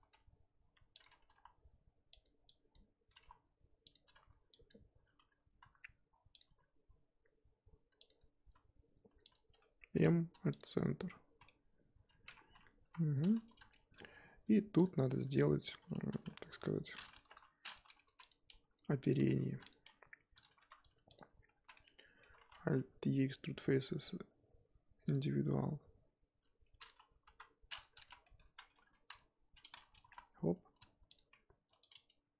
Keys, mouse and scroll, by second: 0.0 s, 1.2 g, 2.4 click, 3.1 g, 4.5 click, 5.5 e, 6.4 s, 8.4 e, 9.9 m, 11.1 scroll down 1, 11.2 z, 11.4-12.4 middle drag, 12.4 scroll down 2, 12.8 KP_1, 13.1-13.5 scroll up 3, 13.5 z, 13.7 shift+middle click, 14.0 scroll, 14.0 scroll up 1, 14.3 z, 15.1-16.0 scroll down 2, 15.3 middle click, 17.3 KP_1, 18.0 ctrl+r, 19.4 ctrl+r, 20.6 3, 21.1 click, 21.5 z, 21.7 middle click, 22.5 alt+e, 27.2 KP_1, 27.4-27.9 scroll up 1, 27.9 z, 28.2-28.6 shift+middle drag, 28.6 1, 29.9 g, 31.8 click.